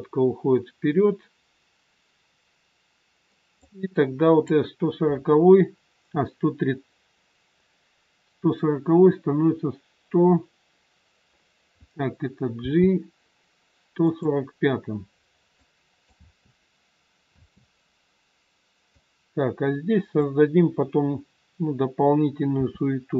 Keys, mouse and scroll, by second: 3.9 click, 12.6 g, 15.5 click, 16.1 space, 17.3 space, 18.9 click, 22.5 r.